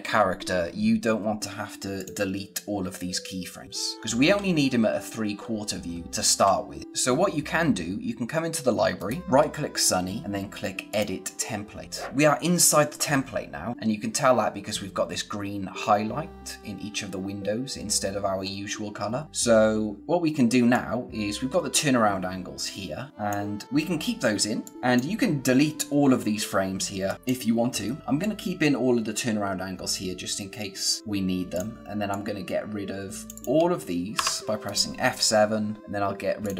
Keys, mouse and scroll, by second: 1.9 click, 3.9-4.5 scroll up 1, 5.3-5.8 scroll down 1, 6.0 scroll up 1, 6.8 click, 8.9 right click, 10.8 click, 12.1 click, 20.7 click, 24.6 click, 33.4 shift+click, 34.1 F7, 34.6 right click, 36.4 click.